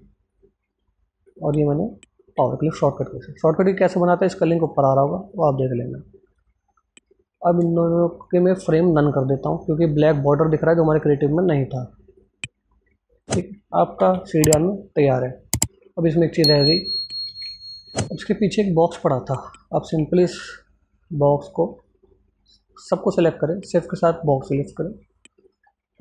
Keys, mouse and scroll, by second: 2.1 alt+z, 2.8 click, 5.3 click, 7.1 shift+click, 8.1 click, 11.2 right click, 12.0 click, 12.9 right click, 13.4 click, 17.1 ctrl+z, 17.7 click, 19.6 ctrl+z, 20.1-24.2 drag.